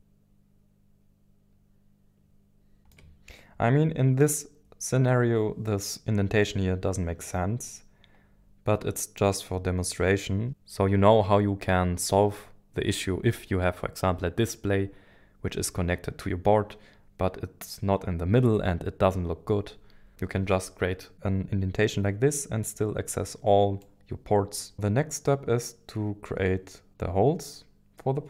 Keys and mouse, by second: 23.8 click, 24.7-28.0 middle drag, 24.7 KP_1, 24.7 KP_7.